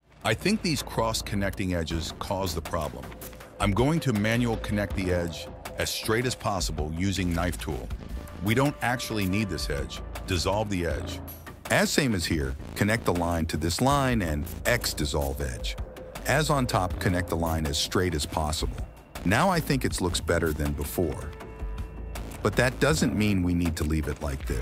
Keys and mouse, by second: 0.6 ctrl+r, 5.8 k, 8.3 click, 8.7 x, 11.0 k, 13.1 click, 13.4 x, 15.2 k, 18.4 k, 21.1 middle click, 22.2 middle click, 22.8 click, 24.1 middle click.